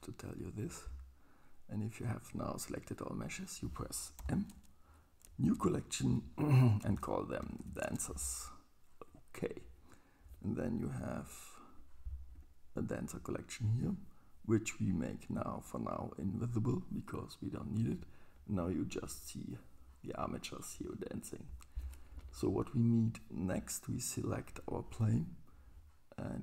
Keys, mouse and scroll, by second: 4.2 m, 12.4 click, 16.4 click, 22.1 shift+Left.